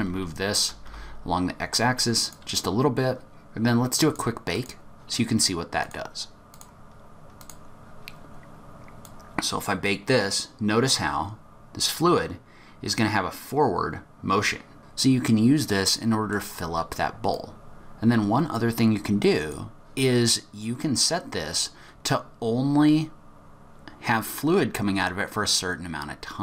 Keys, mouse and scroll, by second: 3.9 click, 4.5 click, 5.8 click, 7.3 click, 9.0 click, 14.8 middle click, 17.3 click, 20.9 click.